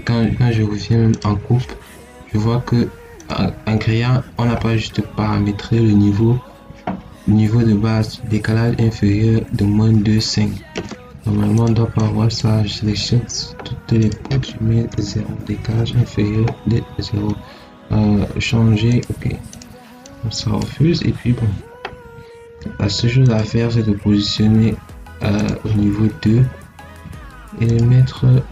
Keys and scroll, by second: 14.8 0.